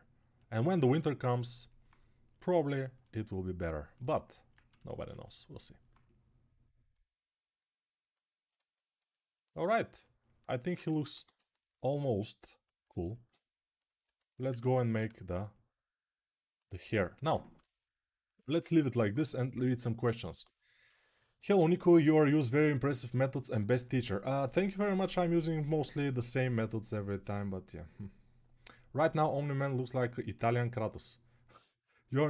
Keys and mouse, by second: 5.7-12.9 right drag, 10.7 ctrl+Tab, 11.0 shift+a, 14.2 Tab, 16.9-18.1 right drag.